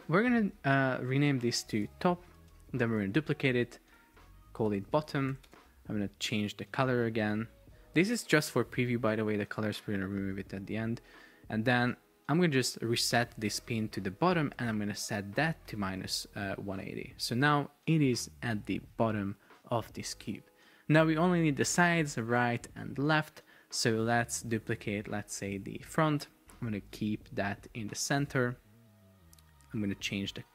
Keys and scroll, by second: 1.9 shift+t, 2.4 Return, 3.1 super+d, 4.1 super+r, 4.9 shift+b, 5.5 Return, 15.2 BackSpace, 16.1 Return, 26.0 super+d, 28.1 Return.